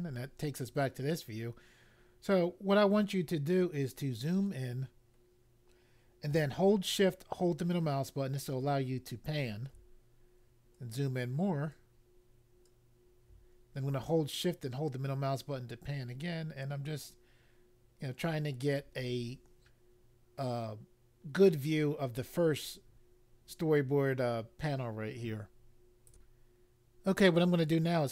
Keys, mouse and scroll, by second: 3.7-4.2 scroll up 1, 5.0 scroll up 1, 7.7 shift+middle click, 10.6-11.6 scroll up 2, 11.6 scroll up 1, 12.5 scroll up 1, 14.3 shift+middle click, 26.0 click.